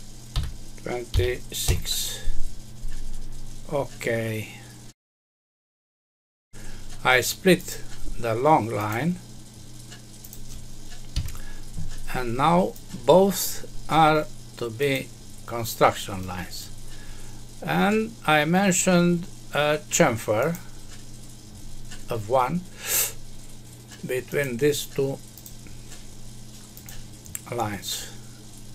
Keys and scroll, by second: 1.6 Return, 11.1 Escape.